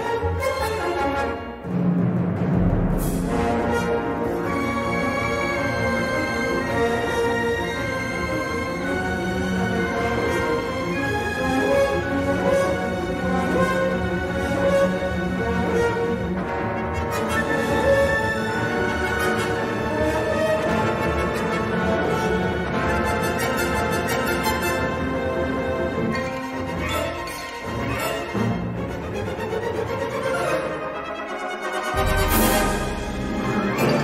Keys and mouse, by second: 1.6 middle click, 2.4 s, 4.6 l, 5.1 s, 7.6 middle click, 8.7 shift+middle click, 12.7 2, 13.8 shift+a, 19.8-21.1 drag, 25.1 middle click, 26.3 s, 27.0 g, 28.1 s, 28.9 g, 31.9 middle click, 32.7 l, 33.0 middle click, 33.6 s.